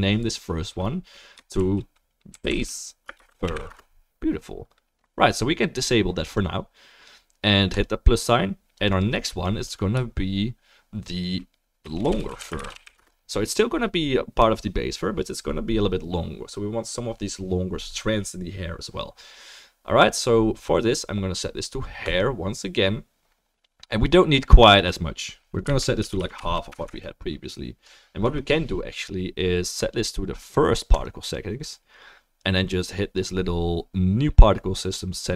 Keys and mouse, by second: 9.0-22.2 drag, 24.7-29.9 drag, 24.7-29.9 middle drag, 26.4 9, 26.8 BackSpace.